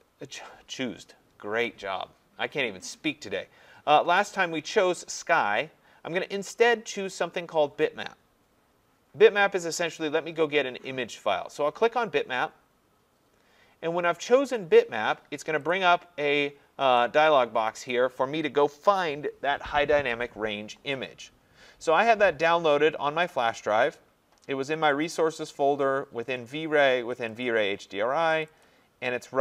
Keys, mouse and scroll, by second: 11.8 click, 15.7 click, 17.9 click, 23.4 click, 24.9 click, 25.1 click, 26.3 click, 26.5 click, 27.3 click, 27.4 click, 28.5 click, 28.6 click.